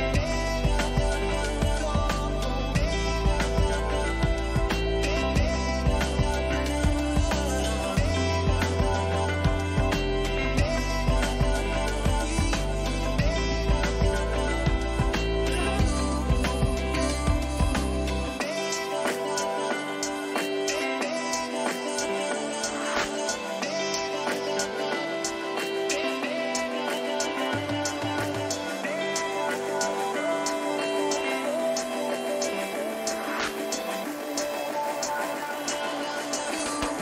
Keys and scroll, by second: 8.2 j, 10.0 ctrl+j, 14.2 Return, 30.0 ctrl+z.